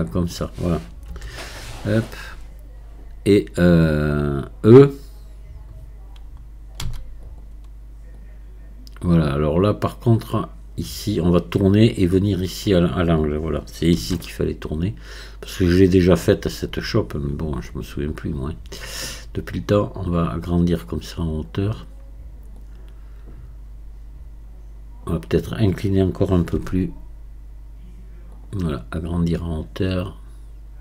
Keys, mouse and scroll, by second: 1.1 KP_1, 8.2-14.0 drag, 14.0 r, 19.1-22.1 drag, 22.6-26.6 drag, 26.6 r, 29.4-30.8 drag.